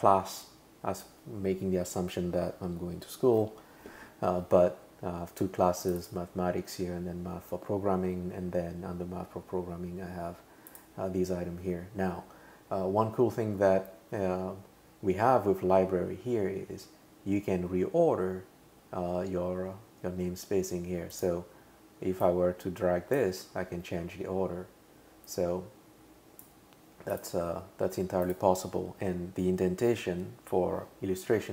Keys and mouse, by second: 10.7 click, 21.1 click, 22.2 click, 25.3 click, 27.1 click, 28.3 click.